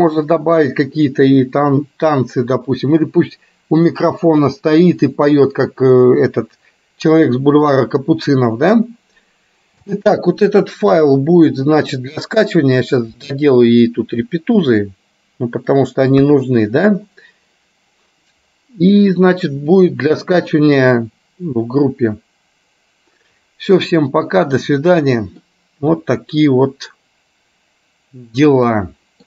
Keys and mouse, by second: 9.9 space, 10.3-11.9 middle drag, 13.3 middle click, 14.3-15.8 middle drag, 16.3 KP_1, 24.7 middle click, 26.2-29.2 middle drag.